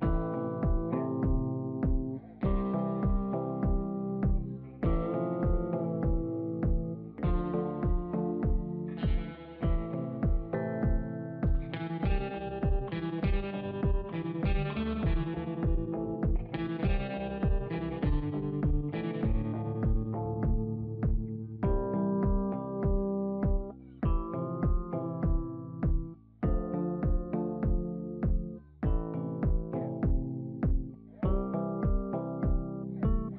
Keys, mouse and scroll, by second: 4.9-9.2 drag, 10.3 ctrl+click, 11.9 click, 20.2 click, 21.7 Down, 22.1 Down, 22.2 typing, 25.6 Down, 26.0 Down, 26.1 typing, 31.1 alt+Up, 31.3 alt+Up, 31.6 alt+Up, 31.8 alt+Up, 31.9 alt+Up.